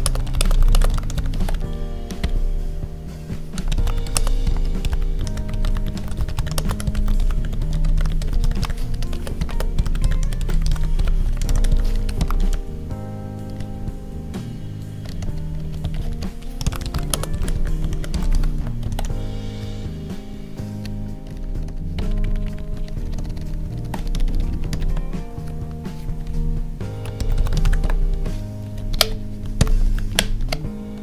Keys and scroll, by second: 0.0-0.7 typing, 1.3 ctrl+s, 4.1 space, 6.5 space, 8.9 Right, 9.1 space, 9.4 space, 11.9 Right, 12.3 ctrl+s, 13.5 Up, 16.0 Up, 17.1 space, 18.5 Tab, 18.8 ctrl+s, 19.6 Down, 22.1 Up, 22.8 ctrl+Down, 23.9 Up, 24.8 Tab, 27.7 Tab, 28.8 ctrl+shift+Left, 29.8 ctrl+s, 30.0 Right.